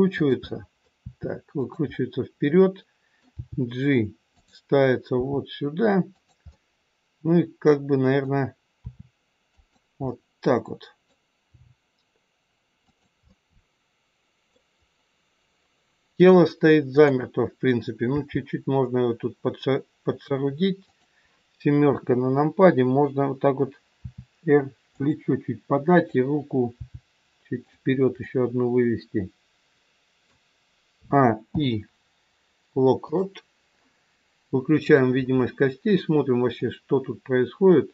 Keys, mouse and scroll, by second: 0.4 middle click, 1.0 r, 1.9 middle click, 3.2 g, 5.2 r, 6.5 middle click, 8.8 r, 10.0 middle click, 10.0 scroll up 1, 11.4 g, 13.3 middle click, 14.6 scroll down 1, 16.3-16.9 scroll down 1, 16.9 click, 18.0 g, 21.7 KP_7, 23.9 r, 25.9 click, 26.8 g, 28.3 middle click, 30.9 a, 31.4 i, 34.8 click, 36.5 click.